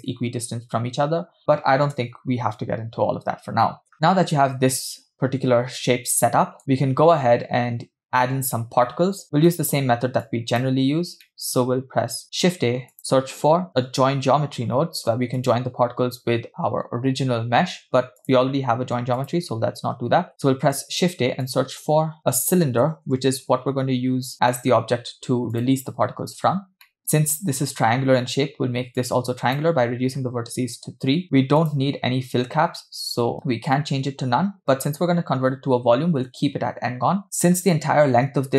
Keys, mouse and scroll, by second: 1.9 KP_0, 3.8 KP_0, 3.9-6.6 middle drag, 3.9 scroll down 2, 9.2 scroll down 4, 9.5 middle click, 10.3 click, 11.3 middle click, 12.2 shift+a, 19.2 click, 20.0 x, 20.3 middle click, 20.7 shift+a, 26.5-26.8 scroll up 1, 26.9 middle click, 27.0-28.2 scroll up 2, 29.0 click, 30.1-30.8 scroll up 1, 30.8 scroll up 1, 31.6-35.6 drag, 37.2-37.6 middle drag.